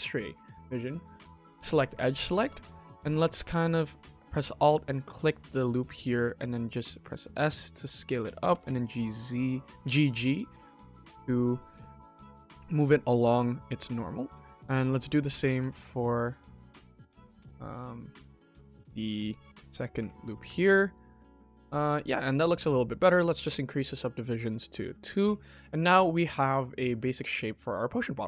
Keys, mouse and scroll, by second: 1.3 click, 1.8 scroll up 1, 2.1 middle click, 3.2 alt+click, 3.7 middle click, 4.6 alt+click, 5.5 middle click, 6.3 5, 8.3 g, 12.2 middle click, 13.0 middle click, 14.0 middle click, 14.6 alt+click, 14.9 middle click, 15.0 middle click, 15.2 g, 18.1 s, 19.9 Tab, 20.2 click, 20.9 click, 21.2-21.6 scroll down 3, 21.7-22.1 middle drag, 22.3 click, 22.5-23.6 scroll up 1, 23.6 click, 24.4 click, 24.8 middle drag, 25.1 click, 25.4 KP_1, 25.5 scroll down 2, 25.9 shift+middle drag, 26.3-26.7 scroll up 3, 26.8 shift+middle drag, 27.7 middle drag, 28.1-28.2 scroll down 2.